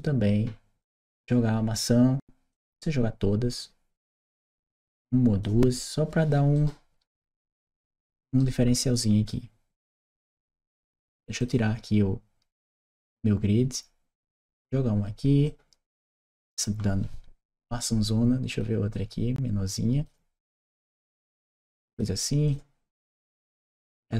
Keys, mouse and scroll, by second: 0.7 click, 2.3-5.3 drag, 6.4-8.2 right drag, 8.2 w, 9.1 click, 11.3 click, 12.6-14.1 drag, 15.3-16.5 drag, 18.3 click, 18.7-19.9 drag, 20.4-21.8 drag, 22.3 click, 22.7-23.9 drag.